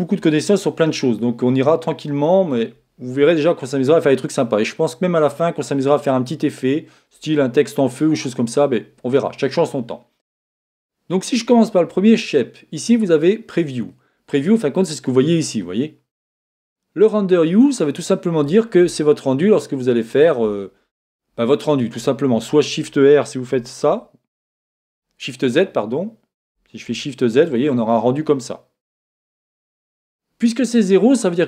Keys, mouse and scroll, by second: 3.3-5.2 middle drag, 5.4-7.2 middle drag, 11.1 click, 14.9-16.8 middle drag, 23.8 shift+z, 26.8 shift+z, 29.2 shift+z.